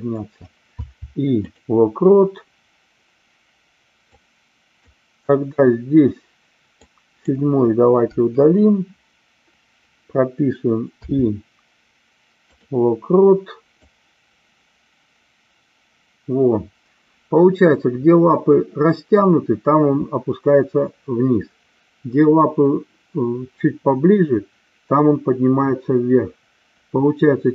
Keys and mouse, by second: 4.1 click, 6.8 click, 8.1 Delete, 13.8-27.5 drag.